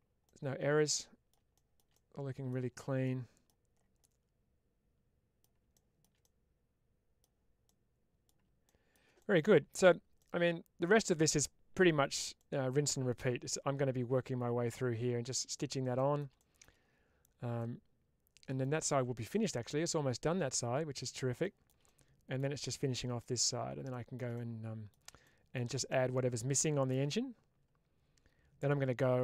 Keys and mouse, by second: 0.1-1.2 middle drag, 1.9-2.4 middle drag, 2.9-3.5 middle drag, 4.0-5.3 middle drag, 6.2-7.1 middle drag, 7.6-8.2 middle drag, 9.0-9.4 middle drag, 10.2-10.7 middle drag, 12.3-13.1 middle drag, 15.9 middle click, 16.2-16.6 shift+middle drag, 17.5-18.5 middle drag, 19.2-21.0 middle drag, 21.8-22.3 middle drag, 22.8 middle click, 24.3-24.8 middle drag, 25.8-26.3 middle drag, 27.0-28.6 middle drag.